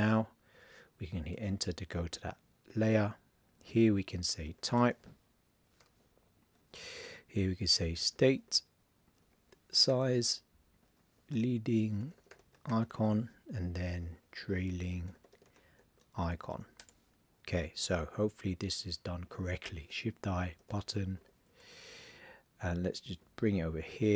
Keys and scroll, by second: 2.9 super+a, 4.0 super+a, 4.4 shift+t, 6.6 super+a, 7.5 shift+s, 9.7 shift+s, 11.3 shift+l, 12.6 shift+i, 13.9 super+a, 14.3 shift+t, 15.8 shift+i, 19.9 shift+i.